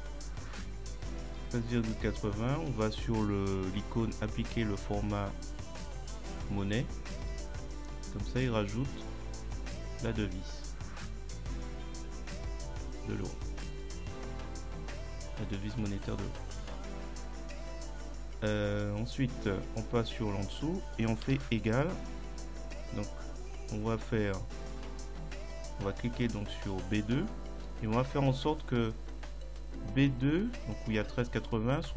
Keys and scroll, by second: 21.3 =.